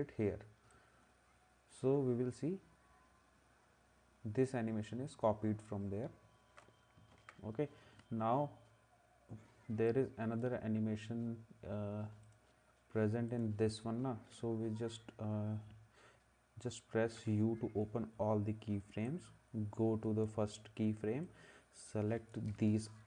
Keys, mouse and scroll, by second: 7.1 ctrl+s, 9.9 click, 12.2 click, 13.4 click, 19.1 click, 21.3 click.